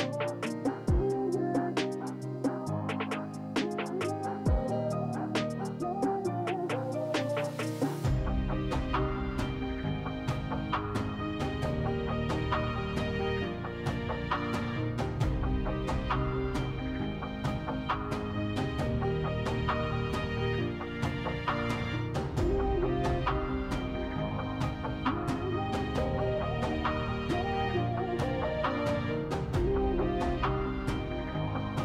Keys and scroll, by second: 3.9 s, 4.5 2, 6.3 s, 11.0-11.8 typing, 21.8 s, 29.4 2.